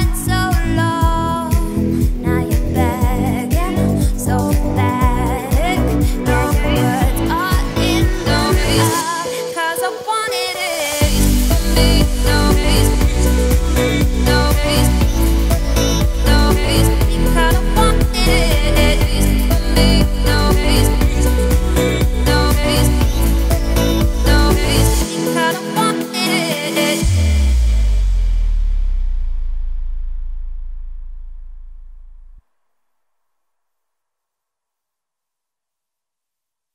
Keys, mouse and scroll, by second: 0.1-1.1 scroll up 4, 1.1-1.4 scroll down 2, 1.4-1.8 scroll up 3, 1.8 s, 4.6 g, 11.0 scroll down 3, 11.2-12.5 shift+middle drag, 12.5 shift+d, 13.5 z, 13.9 shift+middle click, 14.1-14.5 scroll up 4, 14.5 z, 14.9 g, 16.9 z, 17.1-17.8 scroll down 11, 17.8-18.5 scroll up 2, 18.5-19.4 scroll up 3, 19.4-20.9 scroll down 3, 20.9 shift+middle click, 21.3-22.3 scroll up 1, 22.6-24.3 scroll up 1, 24.3 z, 24.6 click, 25.7-27.1 shift+middle drag, 27.1 scroll up 1, 27.7 shift+d, 29.5-30.1 scroll up 4, 30.1 g, 32.0-32.5 scroll down 4, 32.5 shift+middle click, 32.7-33.2 scroll up 5, 33.2 g, 34.0 g, 35.3-36.4 scroll down 8, 36.4 x.